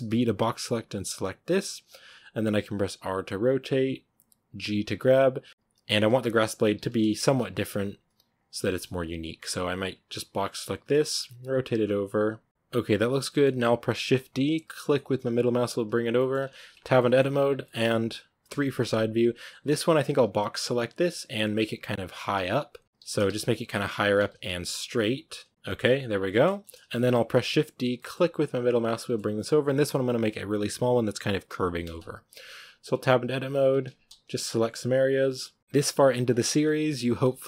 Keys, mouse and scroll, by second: 1.3 b, 1.9 r, 4.5 g, 5.5-9.0 typing, 10.6 b, 10.8 r, 11.5 g, 12.3 r, 12.5 right click, 13.2-14.0 shift+middle drag, 14.0 shift+d, 16.0 shift+middle drag, 16.3 scroll up 2, 16.7 Tab, 16.8-17.4 middle drag, 17.4 scroll down 1, 17.5-18.3 middle drag, 18.3 KP_3, 20.7-23.4 typing, 24.1 click, 24.6 b, 25.0 g, 25.5 Tab, 26.0 scroll down 2, 26.3-27.2 shift+middle drag, 27.2 shift+d, 28.8-32.5 shift+middle drag, 32.5-32.8 scroll up 1, 32.8 Tab, 33.6 a, 34.7-37.1 typing.